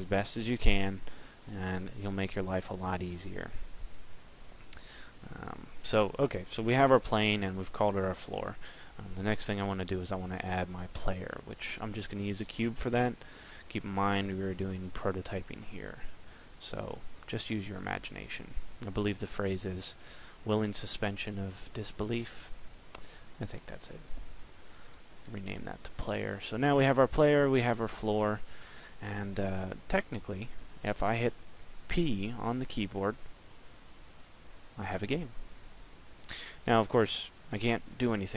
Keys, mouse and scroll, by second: 9.3 shift+a, 12.9 click, 29.1 middle click, 32.9 p.